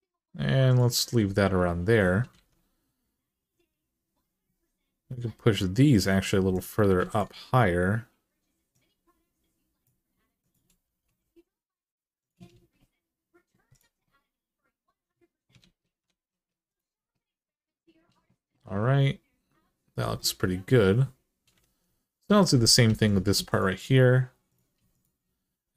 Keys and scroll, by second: 2.1 alt+z, 10.8 g, 15.4 ctrl+z, 15.8 ctrl+z, 21.4 alt+z, 22.6 3.